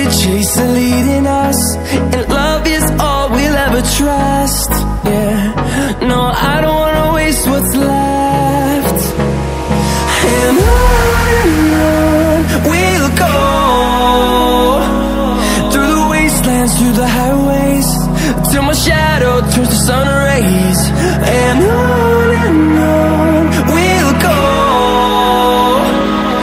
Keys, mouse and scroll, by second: 1.2 right click, 4.1 click, 5.2 ctrl+alt+scroll down 1, 6.5-18.3 drag, 18.3 Left, 21.6 Down, 22.3 Right, 23.0 Down, 23.8 Left, 25.8 click.